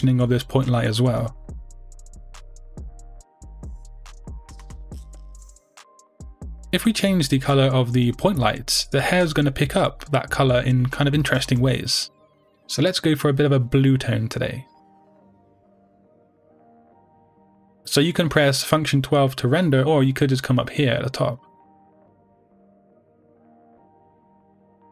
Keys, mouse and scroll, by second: 0.3-4.2 drag, 4.2 middle click, 5.0 g, 6.2 click, 6.9 KP_0, 8.2 g, 9.1 click, 18.4 F12.